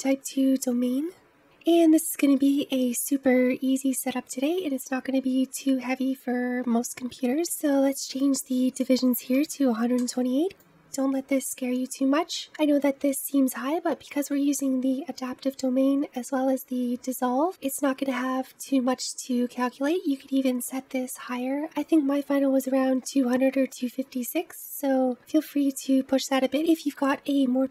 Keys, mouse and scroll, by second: 6.8-8.1 scroll down 3, 8.1-11.0 drag, 14.5-17.4 scroll down 1.